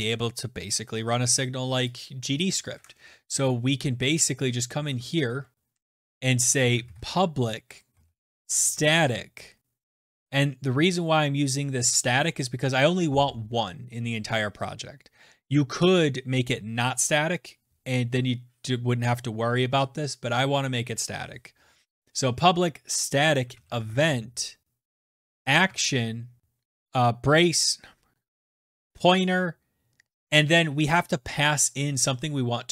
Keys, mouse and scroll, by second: 2.7 click, 4.9 Return, 4.9 Delete, 5.5 BackSpace, 5.7 BackSpace, 6.1 BackSpace, 6.5 Return, 7.1-9.9 typing, 23.9-27.1 typing.